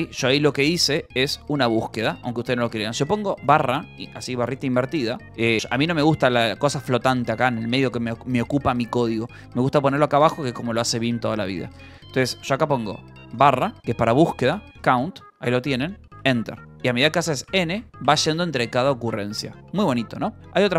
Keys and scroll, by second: 1.4 Escape, 1.7 j, 2.3 k, 3.3 /, 13.2 /, 14.4-15.7 typing, 16.0 Return, 17.4 n, 20.5 Escape.